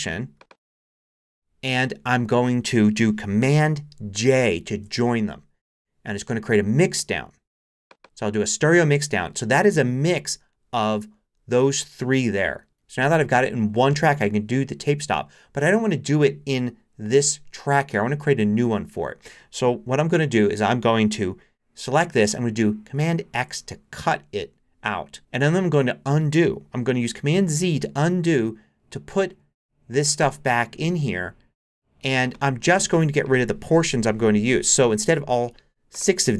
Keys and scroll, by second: 4.7 super+j, 23.3 super+x, 27.6 super+z.